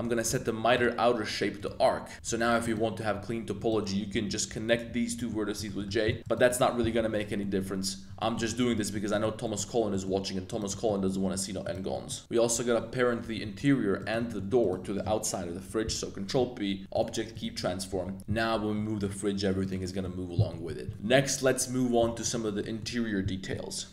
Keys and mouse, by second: 0.8-1.6 drag, 2.1 1, 2.6 click, 3.6 shift+click, 4.1 j, 5.1 middle click, 5.6 shift+middle click, 6.0 middle click, 6.9 j, 7.4 shift+click, 8.2 click, 8.5 z, 8.7 click, 9.1 middle click, 9.4 middle click, 9.9 middle click, 10.5 right click, 10.7 middle click, 11.6 shift+click, 11.9 middle click, 12.2 z, 13.2 z, 14.0 shift+click, 14.2 middle click, 14.6 shift+click, 15.8 super+p, 17.3 click, 17.9 g, 18.2 a, 18.3 g, 19.6 click, 19.8 middle drag, 20.4 middle click, 20.6 z, 20.9 middle click, 20.9 super+s, 22.2 z, 22.2 middle click, 22.6 middle drag.